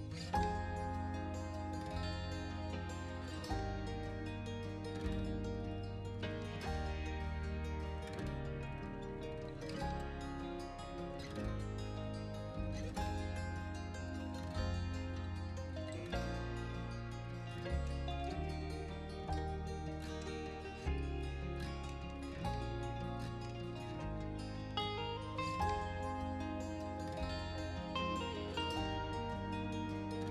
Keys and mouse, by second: 0.0 x, 1.1 right click, 1.3 middle click, 1.9 s, 2.1 x, 2.6-3.3 middle drag, 3.4 KP_1, 3.8 middle click, 4.2 middle click, 4.6 r, 4.7 z, 5.4 drag, 5.6-6.0 middle drag, 6.9 shift+g, 7.1 shift+z, 7.4 click, 7.6 r, 7.8 z, 8.9 click, 9.1 middle click, 9.6 r, 9.7 z, 11.1 click, 11.4 middle click, 11.9 middle click, 13.5 s, 14.2 middle drag, 14.9 s, 15.3 click, 15.5 s, 17.0 click, 17.4 x, 18.8 click, 19.0-19.7 middle drag, 20.0 middle click, 20.3 KP_1, 20.6 middle click, 21.6 s, 21.7 x, 22.4 right drag, 22.5 middle click, 22.9 KP_1, 23.1-23.4 middle drag, 23.6 KP_3, 24.0 middle click, 24.6 r, 24.7 z, 25.5 drag, 25.7-26.3 middle drag, 27.6 shift+click, 28.0 shift+d, 28.3 shift+z, 29.7 r, 29.8 z.